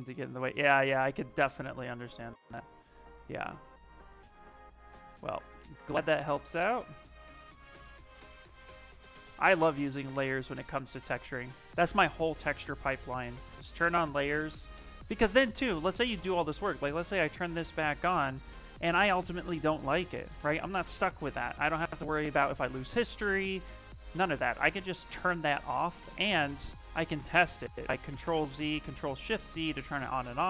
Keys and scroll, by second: 2.0 s, 30.1 ctrl+z.